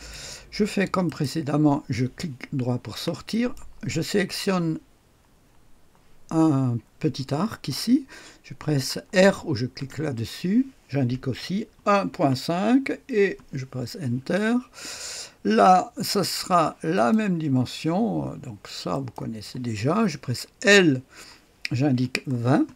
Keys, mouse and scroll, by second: 0.3 right click, 1.0 right click, 3.2 click, 9.7 r, 11.2 KP_1, 11.7 KP_Decimal, 12.0 KP_5, 13.2 Return, 14.1-14.9 typing, 14.3-16.6 scroll up 1, 16.9 click, 18.9 click, 20.6 l, 21.9-22.7 typing, 22.6 Return.